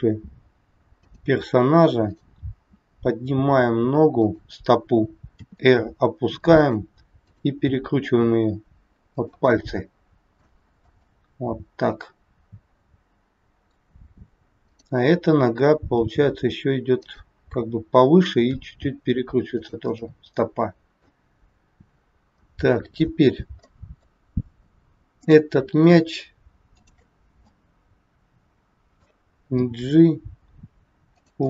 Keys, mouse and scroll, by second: 2.0 click, 2.6 g, 5.2 r, 7.1 click, 8.0 r, 9.6 middle click, 10.7 scroll down 2, 11.1 middle click, 14.6 click, 16.0 g, 18.5 r, 20.0 middle click, 21.6-22.3 scroll up 1, 22.3 middle click, 23.5 scroll up 2, 23.7 middle click, 25.1 click, 26.6 shift+click, 27.5 middle click, 29.6 g.